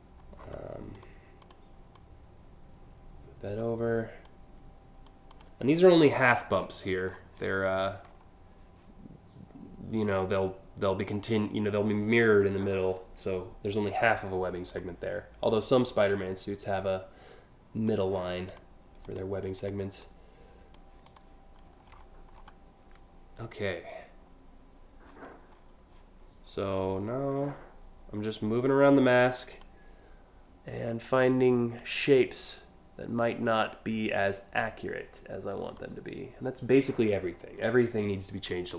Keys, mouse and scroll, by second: 0.0 scroll down 4, 0.6 click, 1.0 click, 1.6-3.2 drag, 3.9 click, 4.9 click, 5.4 scroll down 1, 6.7 scroll down 4, 7.7 scroll up 1, 14.3 click, 15.7-17.5 drag, 18.1 click, 18.7 click, 19.2 click, 19.7 click, 20.7 click, 21.5 scroll down 1, 22.0 alt+scroll down 3, 24.8-25.3 scroll up 3, 29.1 click, 30.7 click, 33.9-35.4 drag.